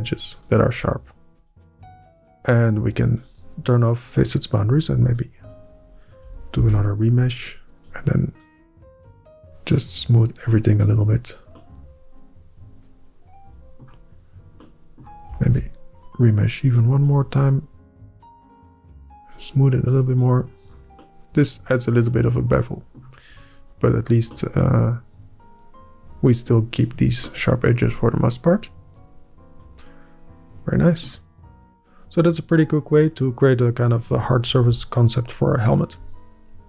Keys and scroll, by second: 6.4 ctrl+Up, 15.8 ctrl+Up.